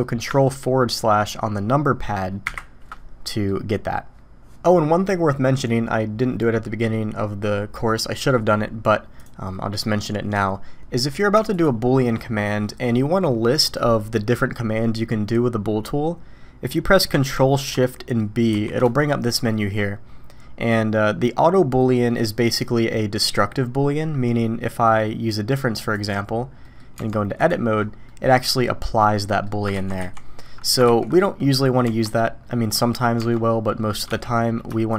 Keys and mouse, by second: 3.3 middle click, 9.2-11.0 drag, 11.0 middle click, 11.6 shift+click, 12.5 middle click, 18.6 ctrl+shift+b, 26.7 click, 27.0 Tab, 28.1 click, 29.3 click, 29.8 ctrl+z, 30.0 ctrl+z, 31.4 click, 31.9 Tab.